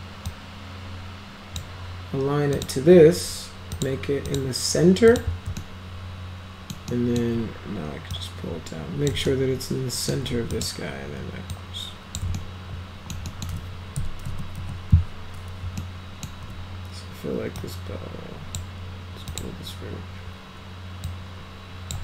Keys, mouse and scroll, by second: 0.2-1.6 drag, 2.5 click, 3.7 click, 4.3 click, 5.1 click, 5.6-6.7 alt+middle drag, 6.9 alt+middle click, 8.1 click, 9.3 alt+middle click, 10.5 click, 11.5 click, 12.3 alt+right click, 13.3 alt+right click, 14.3 F3, 14.5 F4, 15.8 alt+middle click, 17.6 click, 19.3 click, 21.1 click.